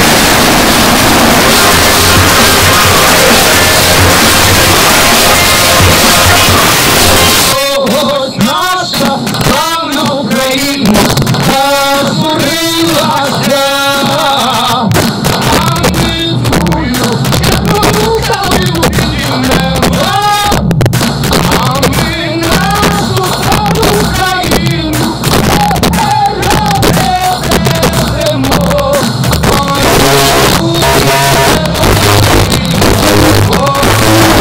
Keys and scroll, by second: 7.4 Page_Down.